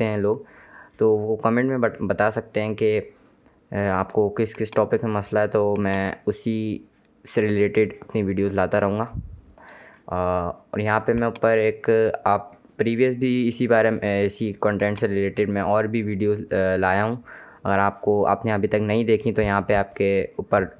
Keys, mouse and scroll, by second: 4.2 click, 9.7 scroll down 1, 10.8 click, 14.4 click.